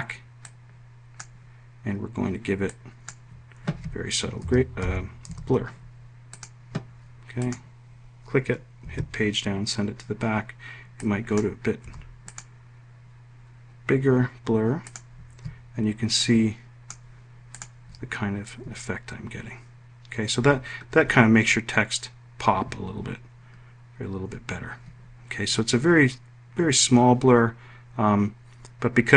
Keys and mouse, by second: 4.2-5.8 typing, 8.9 Page_Down, 11.1 click, 11.9 1, 12.3 click, 14.9 click, 16.3 click.